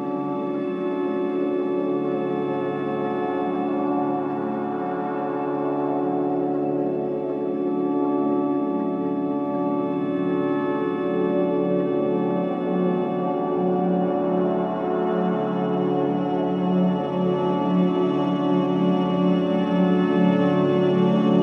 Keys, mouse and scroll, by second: 0.3 scroll down 1, 1.0-1.4 scroll up 1, 2.3 click, 4.0-4.4 scroll down 1, 4.4 scroll up 1, 4.7-5.2 scroll down 1, 5.3-5.7 scroll up 1, 5.3 typing, 5.7-6.5 scroll down 1, 7.5-8.5 scroll down 1, 8.6 scroll up 1, 9.1 scroll down 1, 13.1 scroll down 1, 16.9 scroll up 1, 19.2-21.4 drag.